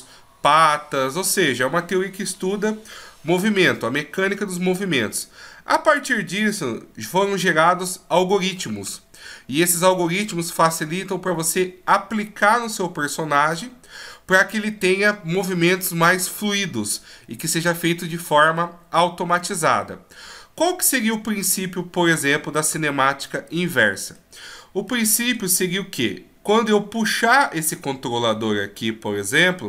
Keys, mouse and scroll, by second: 22.5 middle click, 29.1 g.